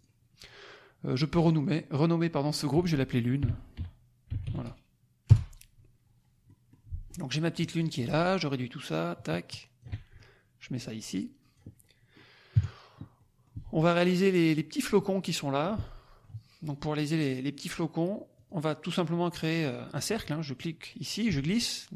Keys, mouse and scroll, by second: 1.5 click, 3.7-4.9 typing, 5.2 Return, 6.5 middle click, 7.1 click, 8.6-10.0 ctrl+shift+drag, 10.1-11.7 ctrl+shift+drag, 11.8 middle click, 12.5 KP_Subtract, 13.3 middle click, 14.9-16.4 middle drag, 18.3 click, 20.7-21.9 drag.